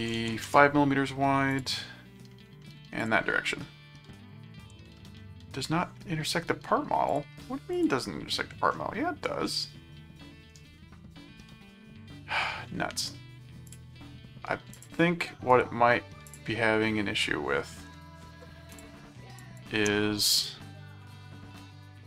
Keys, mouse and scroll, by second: 0.2 ctrl+a, 1.5 click, 3.0 click, 5.0 middle click, 7.1 click, 7.7 click, 8.7 middle click, 9.4-10.7 middle drag, 10.9-12.4 middle drag, 13.7 click, 14.7 click, 15.5 right click, 16.2 click, 18.7 click, 19.4 click, 20.3 right click.